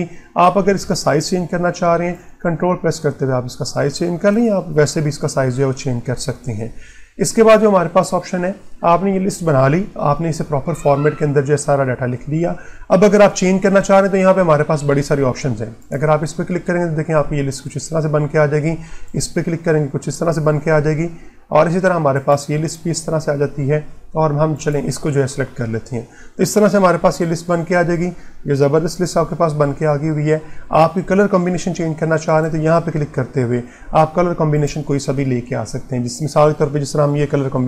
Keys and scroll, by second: 14.0 ctrl+1, 20.6 ctrl+1.